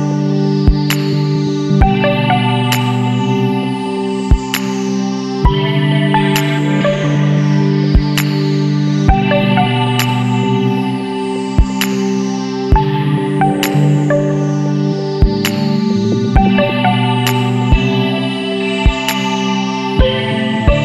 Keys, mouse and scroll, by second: 1.0 click, 4.5 click, 8.3 click, 10.2 click, 12.9 Escape, 14.1 click, 15.5 click, 16.5-17.1 scroll down 2, 18.0 click, 18.6 KP_3, 18.8 KP_2, 19.1 KP_Enter.